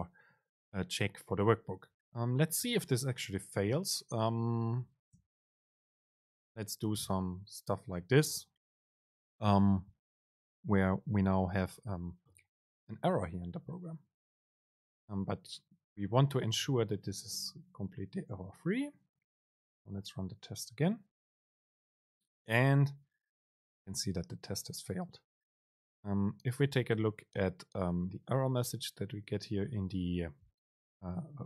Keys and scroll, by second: 18.3 super+r.